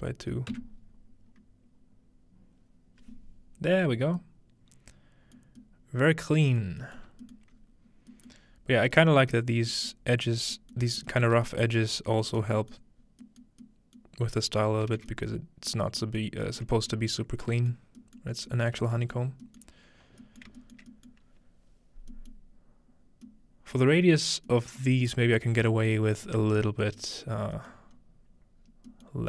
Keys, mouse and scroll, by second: 0.5 Return, 6.6 middle click, 7.0-8.2 alt+middle drag, 7.5-8.5 scroll up 1, 8.4 alt+middle click, 8.5-9.9 scroll down 1, 9.9-10.5 middle drag, 10.8 shift+middle click, 11.4 shift+middle click, 11.7-12.1 alt+shift+middle drag, 12.3 alt+shift+middle click, 12.8-13.3 middle drag, 13.0-14.3 scroll down 1, 14.2 middle click, 14.9 alt+middle drag, 16.0 middle drag, 16.3-17.7 shift+middle drag, 17.7 middle drag, 18.2-18.7 shift+middle drag, 18.8 middle click, 19.4 middle click, 20.0 middle click, 20.4 shift+middle drag, 20.8 shift+middle click, 21.3 middle click, 21.3-22.1 scroll up 2, 22.1 scroll up 1, 24.0-24.5 middle drag, 26.2-26.7 scroll down 3, 27.2 scroll up 3, 27.7-28.9 middle drag, 28.0-28.6 scroll up 2, 28.6 scroll down 1, 29.1 middle click.